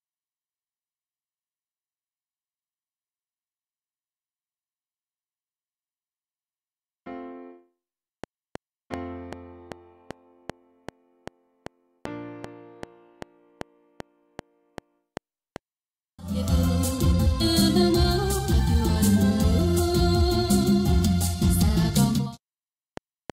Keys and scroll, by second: 8.1 F7, 15.5 space, 22.0 space, 22.8 F7.